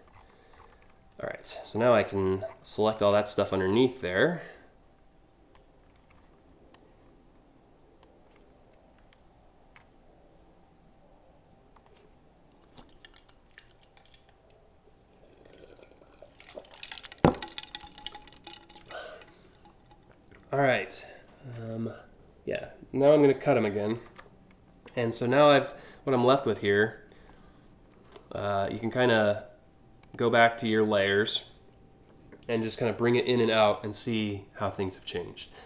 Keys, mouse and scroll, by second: 1.3-1.9 scroll up 5, 2.0 scroll down 1, 3.0 click, 3.8-5.2 drag, 6.3-7.6 shift+drag, 20.3 scroll up 2, 23.6 ctrl+x, 24.5 scroll down 2, 24.9 scroll up 3, 25.8 alt+scroll down 1, 26.9 alt+scroll up 3, 27.1 alt+scroll down 1, 28.3 scroll up 2, 29.6 click, 30.7 click, 32.5 click, 33.8 click, 34.3 click.